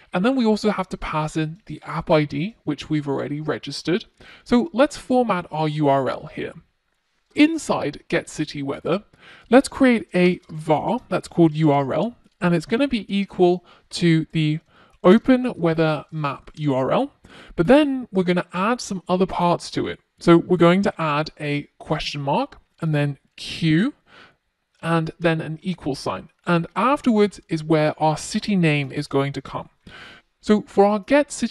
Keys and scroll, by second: 13.6 Return.